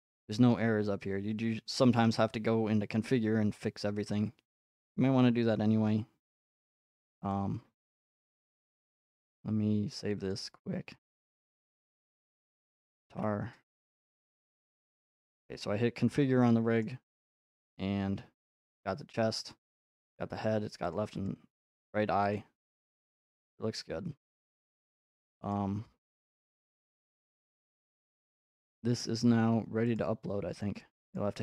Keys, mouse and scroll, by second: 7.3 click, 8.4 click, 10.3 click, 10.5 click, 11.1 click, 11.2 click, 11.7 click, 12.0 click, 12.0-13.6 typing, 12.3 click, 12.6 click, 15.1-16.2 scroll, 15.2-15.9 typing, 16.8-17.1 scroll, 19.7 click, 20.9 click, 21.3 click, 22.3 click, 22.9-24.0 scroll, 25.5 click, 25.5 scroll, 28.4 click, 30.0 click, 31.1 click.